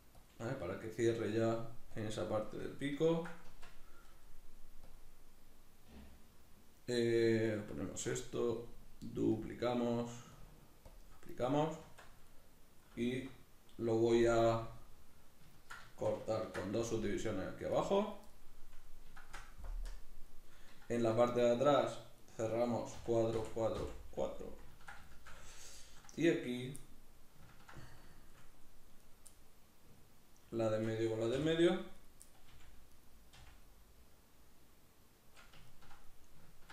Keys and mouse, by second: 0.1 click, 0.2 g, 0.7 click, 2.6-4.6 ctrl+middle drag, 3.3 Tab, 4.6-12.0 drag, 11.6 Tab, 12.0-22.0 middle drag, 12.9 \, 14.0 KP_Decimal, 16.2 ctrl+r, 17.8 right click, 19.5 KP_Decimal, 22.0 right click, 22.7 f, 24.2-26.3 middle drag, 26.3 right click, 26.5-28.8 middle drag, 28.8 right click, 29.1-30.4 middle drag, 30.4 shift+right click, 31.1 f, 31.7 right click, 32.0 middle click, 32.3 f, 32.7 right click, 33.1 f, 33.4-36.7 middle drag.